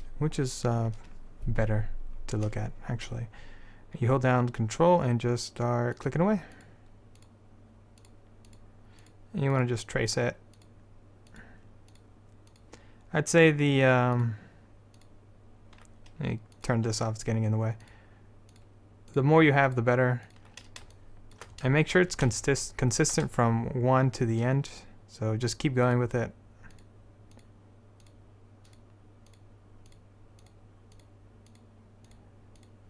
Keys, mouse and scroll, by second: 10.8 ctrl+click, 21.1-22.2 middle drag, 22.5 middle click, 22.7 middle click, 26.0-32.8 drag.